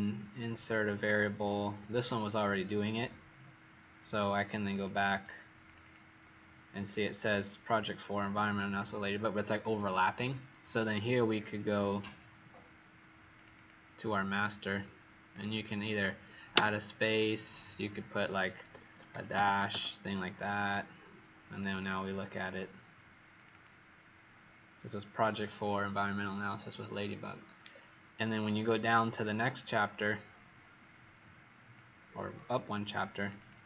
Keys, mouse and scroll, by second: 1.9 click, 4.7 click, 5.6 click, 5.7 click, 13.2 click, 13.4 click, 15.2 click, 21.6 click, 23.4 click, 27.6-28.1 alt+scroll down 1, 28.4-31.7 scroll down 27, 31.7 click, 33.3 click.